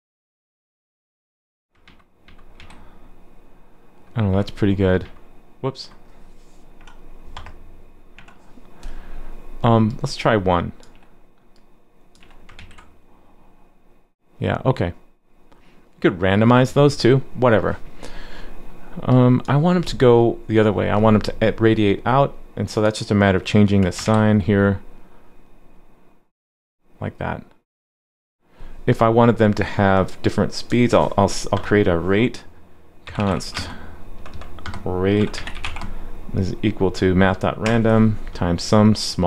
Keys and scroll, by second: 1.8 super+z, 2.2 super+z, 2.6 super+s, 4.3 super+z, 5.0 super+z, 12.6 super+s, 24.0 super+s.